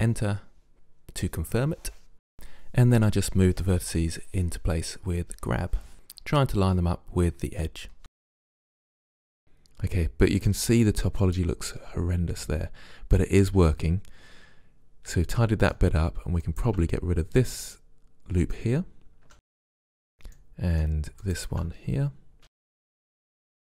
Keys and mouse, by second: 0.8 g, 2.0 click, 2.7 right click, 2.9 g, 3.8 click, 4.5 right click, 4.7 g, 5.7 right click, 6.4-7.8 middle drag, 9.4-11.4 middle drag, 11.5-13.0 middle drag, 13.3 middle click, 16.5-18.4 drag, 18.4 middle click, 19.3 Delete, 22.4 click, 22.4 Delete, 23.4 right click.